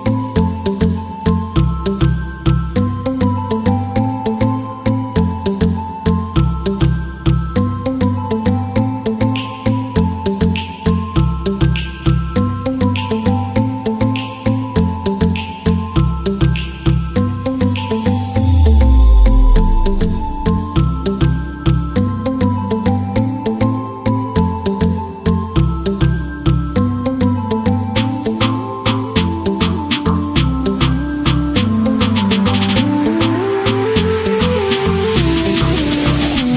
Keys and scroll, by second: 0.0-1.1 typing, 1.6 Return, 3.9-11.4 typing, 13.5 Return, 14.4 shift+,, 16.4-20.9 typing, 18.3 Return, 21.3 Return, 22.4 Caps_Lock, 22.7-25.4 typing, 26.1 Return, 26.9 shift+,, 28.1 d, 28.3 d, 29.5 shift+., 30.0 Return, 34.5-36.5 typing.